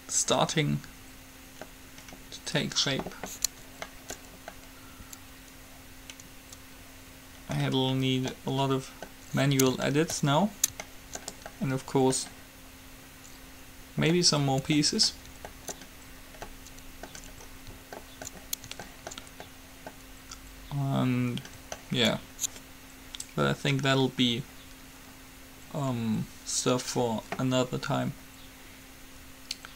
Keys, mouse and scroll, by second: 7.1-13.8 middle drag, 14.3-23.8 middle drag.